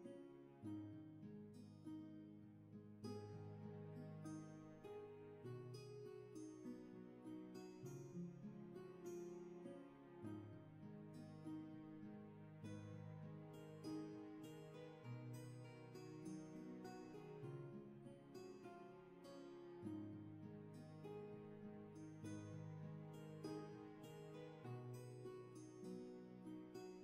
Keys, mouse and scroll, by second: 3.5 ctrl+z, 7.0 ctrl+z, 11.0 ctrl+z, 21.7 ctrl+z, 26.9 ctrl+z.